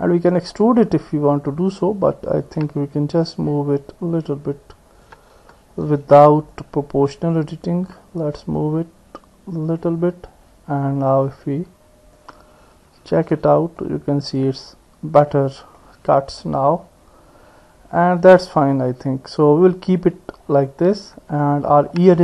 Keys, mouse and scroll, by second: 2.3-5.1 drag, 5.4 ctrl+z, 6.5 click, 7.4-9.9 drag, 12.2 click, 13.4 Tab, 13.8 middle click, 15.8-18.0 middle drag, 18.8 middle click, 20.7-22.0 middle drag.